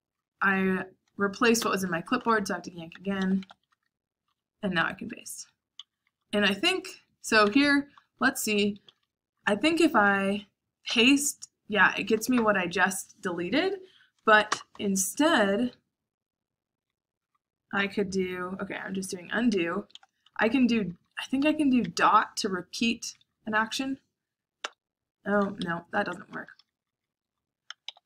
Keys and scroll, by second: 0.0-0.3 typing, 1.5-6.4 typing, 7.5 shift+v, 8.8-11.5 typing, 14.4 u, 17.2 u, 18.8 ctrl+r, 19.2-22.3 typing, 23.4 l, 24.6 ., 25.6 Escape, 25.8-28.0 typing.